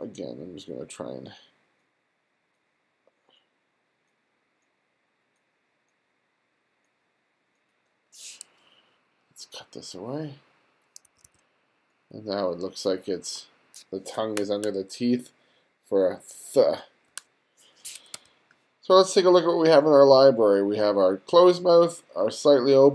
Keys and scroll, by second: 10.8 2, 13.9 BackSpace, 16.8 BackSpace, 17.8 1.